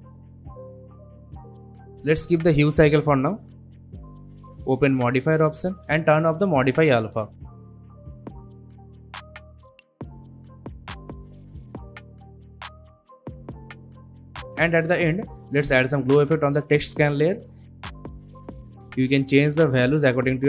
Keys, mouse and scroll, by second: 4.0-4.8 scroll down 1, 4.8-10.1 drag, 13.0-14.9 scroll down 1, 15.4 click, 16.3-17.4 typing, 18.0 click.